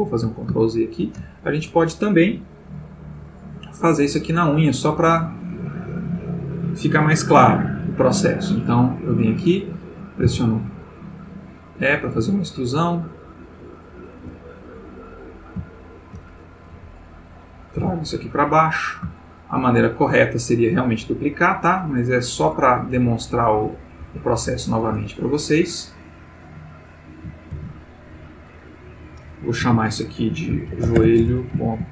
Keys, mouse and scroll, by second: 0.6 ctrl+shift+middle click, 9.0 click, 10.2 e, 11.3 click, 11.7 click, 12.1 g, 13.3 click, 13.9 click, 14.1 g, 15.2 click, 15.7 shift+middle click, 16.7 g, 17.6 click, 17.8 e, 18.7 click, 19.1 shift+middle click, 20.0 shift+click, 20.7 right click, 21.2 click, 22.3 click, 23.0 g, 24.1 Escape, 24.6 click, 24.8 g, 25.6 click, 26.9 click, 27.6 shift+d, 28.8 click, 29.6 F2, 30.7-31.5 typing.